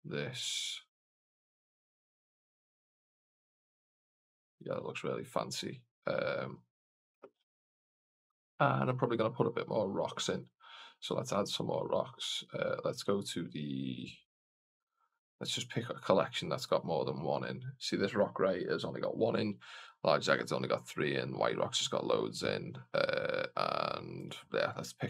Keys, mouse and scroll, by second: 0.2 click, 0.9 click, 1.8 click, 3.6 click, 9.4-10.3 scroll up 1, 10.3 click, 11.3 click, 12.5-15.1 drag, 16.5-24.2 drag.